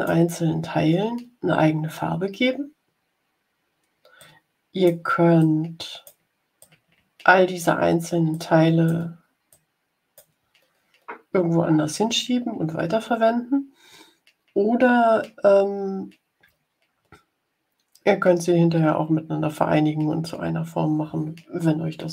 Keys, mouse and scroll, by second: 4.1 click, 5.3 click, 6.5-7.7 drag, 8.2 click, 9.4 click.